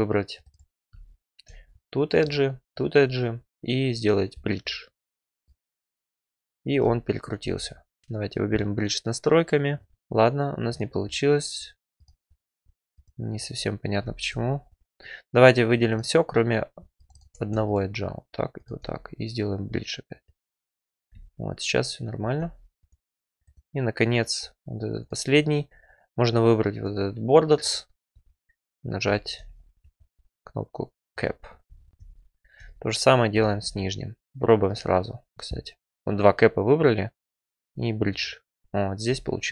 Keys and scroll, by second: 8.0 ctrl+z.